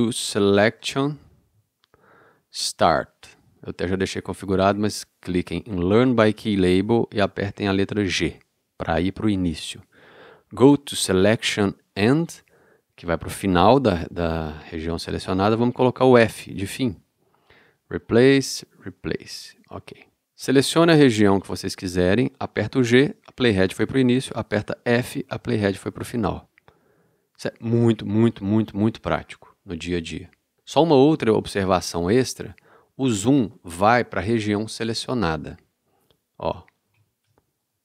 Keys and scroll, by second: 1.1 o, 8.2 g, 16.3 f, 22.8 g, 25.1 f, 37.0 super+space.